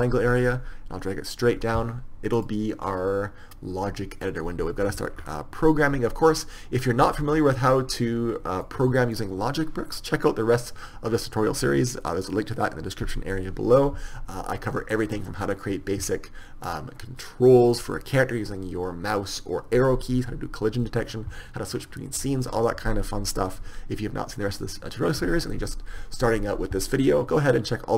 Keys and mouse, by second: 0.5 click, 0.7 click, 0.9 click, 2.4 click, 4.8-24.0 drag, 24.0 click, 24.5-27.8 drag.